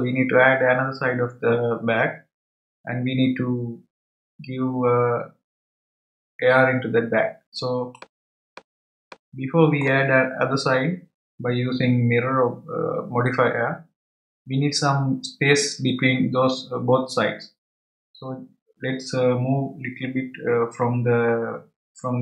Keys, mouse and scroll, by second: 7.9 click, 9.0-12.1 middle drag.